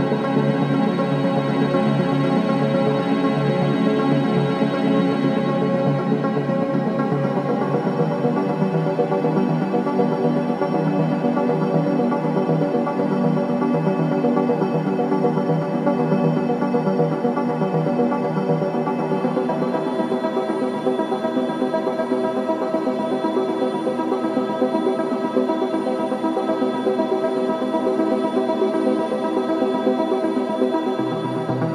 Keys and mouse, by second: 0.9 g, 6.2-8.2 drag, 6.8 z, 8.7 r, 20.5-27.0 middle drag, 29.1 s.